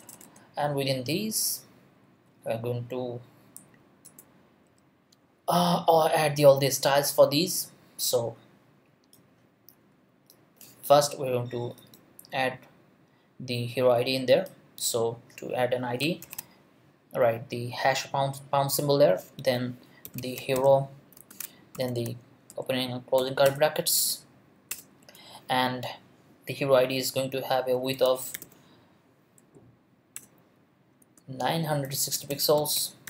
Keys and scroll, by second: 1.1 Up, 4.0 Return, 4.6 Up, 16.2 shift+3, 19.8-21.9 typing, 22.5 shift+Left, 23.1 Left, 23.2 Return, 23.4 BackSpace, 24.1 Left, 24.7 Return, 27.7-28.9 typing, 30.2 Return, 31.0-33.0 typing.